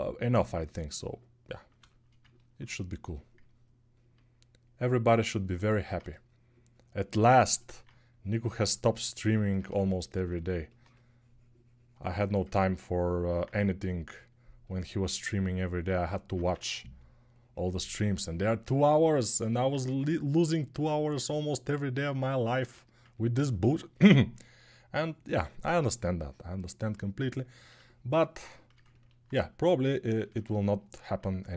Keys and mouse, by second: 16.2 2.